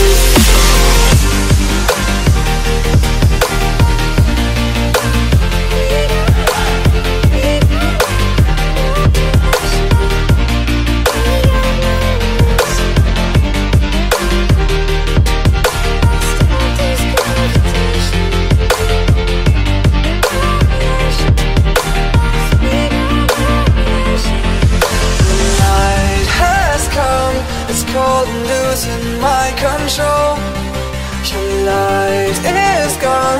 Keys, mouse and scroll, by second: 0.3 click, 1.1 alt+click, 3.3 click, 3.8 click, 4.0 click, 5.6 alt+click, 5.8 alt+click, 6.4 click, 6.6 click, 7.9 click, 8.7 click, 9.5-9.9 ctrl+click, 9.8 click, 12.0 click, 12.8 ctrl+z, 13.5 ctrl+space, 13.8 click, 15.2 click, 15.9 click, 16.3 click, 16.9-17.3 ctrl+click, 17.0 ctrl+click, 17.1 click, 20.7 ctrl+space, 20.7 ctrl+click, 21.0 click, 21.1 click, 22.9 click, 23.9 click, 25.5 click, 26.9 click.